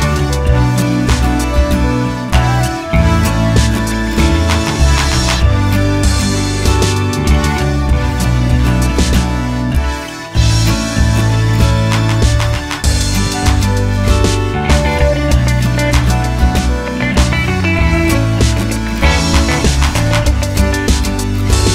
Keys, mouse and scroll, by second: 13.5-21.7 drag.